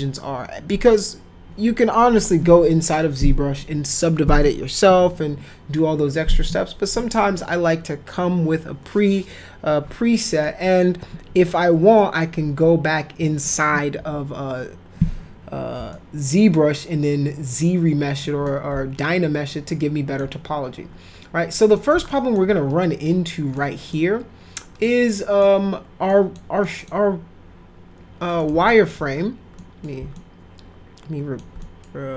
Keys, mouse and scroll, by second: 10.4 middle click, 11.3 F3, 12.0 middle click, 12.4 F4, 15.9-18.2 alt+middle drag, 18.4-20.2 alt+middle drag, 21.8 middle click, 22.1 alt+middle click, 23.5 middle click, 24.8 middle click, 26.1 middle click, 26.6 middle click, 28.4 middle click, 28.6 alt+middle click, 29.6 middle click, 30.1-31.4 alt+middle drag, 31.6 middle click.